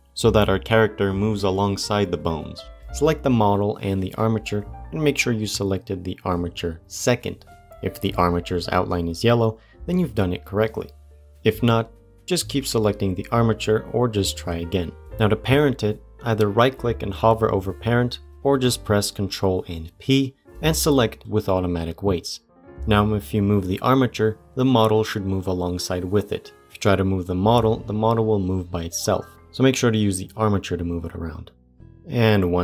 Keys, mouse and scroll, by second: 1.1 click, 3.0 click, 4.2 shift+click, 16.1 ctrl+p, 16.4-18.2 right drag, 18.4 ctrl+p, 23.0 click, 24.0 g, 27.3 ctrl+Tab, 27.8 click, 28.2 g, 31.7 click.